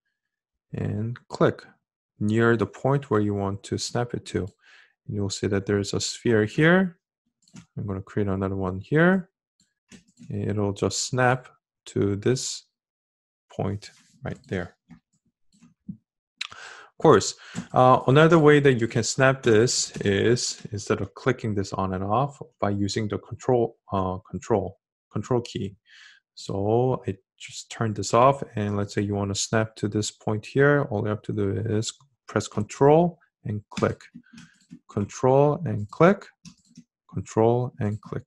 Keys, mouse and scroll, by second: 22.2-34.1 ctrl+drag.